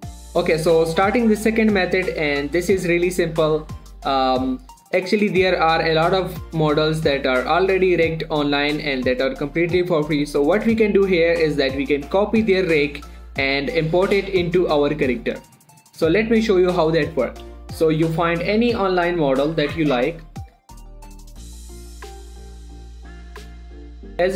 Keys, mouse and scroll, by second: 18.4 click, 21.2 typing, 21.8 Right, 21.9 Return, 22.1 middle click, 22.2 click, 23.9 scroll down 1.